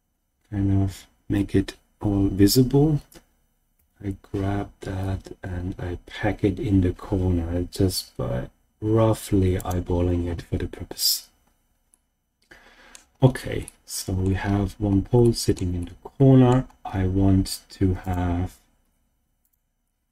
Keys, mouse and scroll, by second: 3.7 g, 9.5 click, 10.3-11.8 scroll down 2, 11.8-12.9 middle drag, 13.1 scroll down 1, 13.2-13.5 scroll down 1, 13.6-14.3 shift+middle drag, 14.4-15.1 scroll up 2, 15.1 scroll up 1, 15.2-15.7 shift+middle drag, 15.7-16.5 middle drag, 15.7-16.5 scroll up 1, 16.8-17.6 scroll down 2, 18.0 click, 18.8 Tab, 19.4 click.